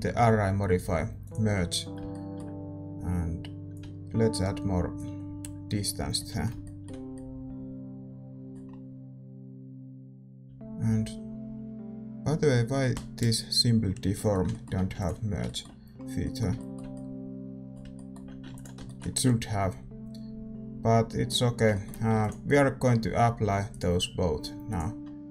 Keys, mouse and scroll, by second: 2.0-3.8 middle drag, 6.1-13.8 middle drag, 13.8 scroll down 1, 14.6 middle click, 15.4 ctrl+s, 18.8 ctrl+s, 21.5 middle click, 23.7 ctrl+s, 23.7-25.3 drag.